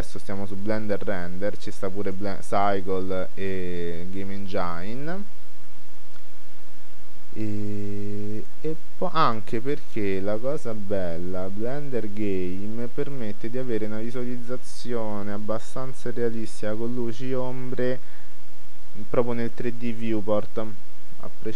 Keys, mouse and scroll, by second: 2.2-3.9 drag, 9.3-11.0 drag.